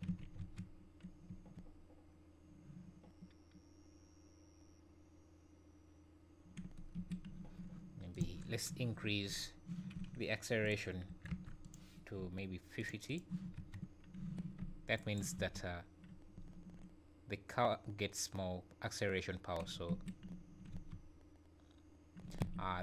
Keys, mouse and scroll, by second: 0.1 alt+a, 0.3 space, 6.9 Escape, 8.1 click, 9.0 Up, 9.3 Up, 10.6 click, 12.7 click, 13.0 click, 13.5 space, 14.2 Escape, 14.9 shift+right click, 15.3 space, 16.1 scroll up 3, 16.3 `, 19.9 Escape, 20.3 `, 20.7 space, 22.4 Escape.